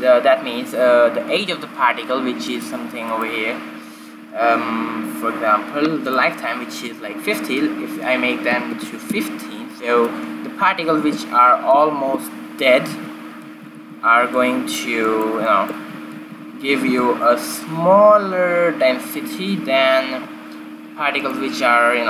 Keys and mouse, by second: 3.5-6.1 drag, 7.1-9.0 drag, 12.1 shift+z, 12.9 shift+Left, 13.9 alt+a, 14.6 alt+a, 14.8 z, 16.9 alt+a, 17.2 alt+a, 18.3 shift+z.